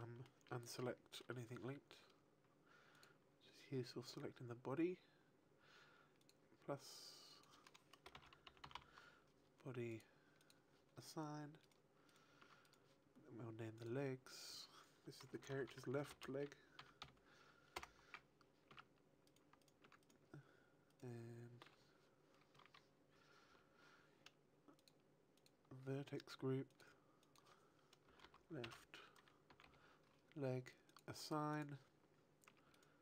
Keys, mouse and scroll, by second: 0.7 shift+middle click, 2.9 click, 6.1 click, 7.2 click, 10.3 click, 11.6 right click, 12.0 right click, 12.3 Tab, 12.6 right click, 13.7 click, 14.2 click, 18.6 Tab, 19.2 right click, 19.5 right click, 19.8 Tab, 19.9 right click, 20.8 right click, 21.8 Tab, 22.7 a, 23.4 l, 24.7 click, 25.3 click, 26.6 click, 27.2 click, 31.2 click, 32.4 Tab, 32.4 click, 32.7 right click.